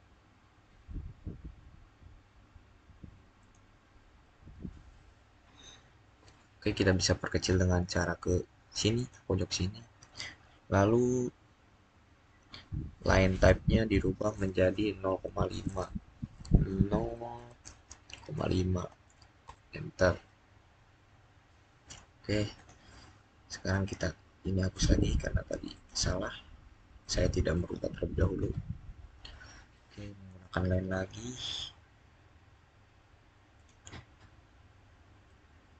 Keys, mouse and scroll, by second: 0.6-1.3 scroll down 1, 2.0 scroll down 1, 3.2 scroll down 1, 3.3 click, 8.8 click, 13.1 click, 16.7 click, 17.2 typing, 18.4-19.1 typing, 19.3 Return, 22.4 click, 30.1 click, 30.9-32.2 scroll up 1, 33.4 click, 34.0 scroll down 1, 35.1-35.7 middle drag.